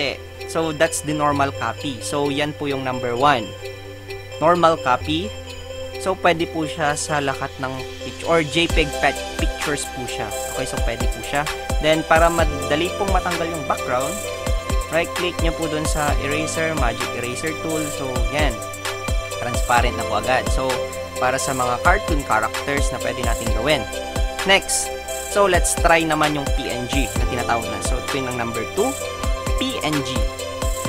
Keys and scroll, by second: 30.4 Delete.